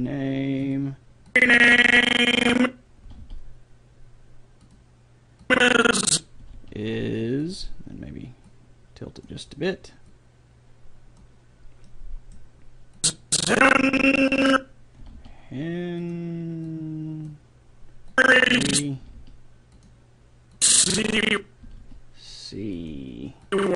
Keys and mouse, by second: 1.3-3.1 drag, 3.1 r, 5.5 click, 6.5 r, 11.7 click, 12.0-13.6 middle drag, 13.0-14.7 drag, 15.1 r, 16.7 click, 19.0 r, 20.6-22.4 drag, 21.7 r, 23.5-23.7 drag.